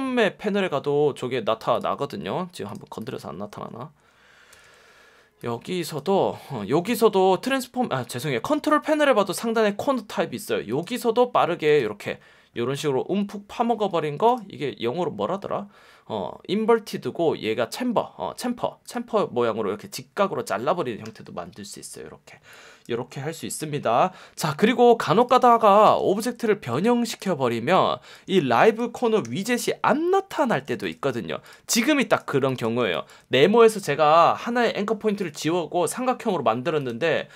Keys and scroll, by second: 4.5 v, 7.4 F1, 21.0 F1, 22.3 space, 26.1 v, 29.2 p, 30.4 v, 32.3 space, 32.8 super+space.